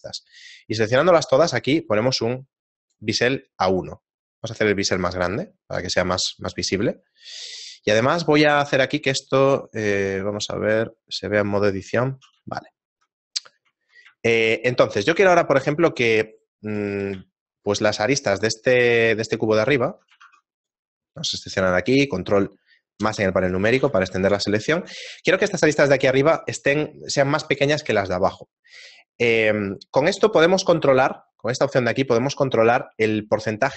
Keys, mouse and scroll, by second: 1.7 click, 4.4 click, 8.7 click, 9.7 click, 11.4 middle click, 12.1 shift+middle click, 12.8 ctrl+middle click, 13.3 right click, 14.2 shift+middle click, 15.2 middle click, 15.6 shift+middle click, 16.3 right click, 18.6 shift+middle click, 18.6 shift+right click, 18.6 z, 19.5 shift+right click, 20.2 ctrl+Tab, 21.2 right click, 23.0 ctrl+KP_Add, 23.8 z, 24.4 shift+middle click.